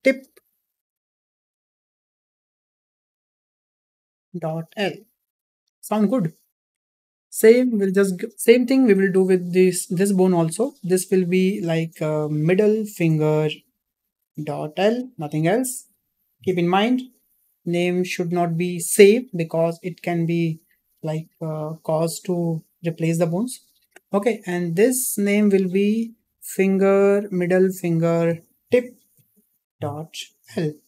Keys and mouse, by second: 11.2-18.1 drag, 24.7-30.8 drag.